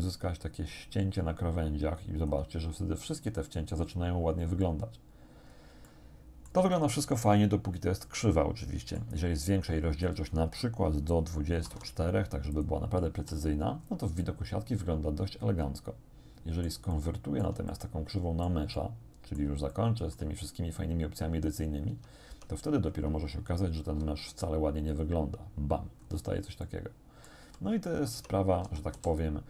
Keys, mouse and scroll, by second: 3.1-3.5 scroll up 1, 5.4 scroll down 1, 5.9 shift+click, 6.9-9.2 shift+drag, 10.1 click, 11.7 2, 12.6 middle click, 13.2 z, 13.8 scroll up 1, 14.3 middle click, 14.6-16.9 drag, 17.0 shift+click, 18.1 click, 18.8 click, 19.7 shift+click, 20.8-21.1 scroll down 2, 21.9 Tab, 23.9 alt+c, 24.9 click, 26.0-26.3 scroll up 2, 26.7 click, 27.5 z, 27.9 click, 28.3 Tab, 28.7 a, 29.2 click.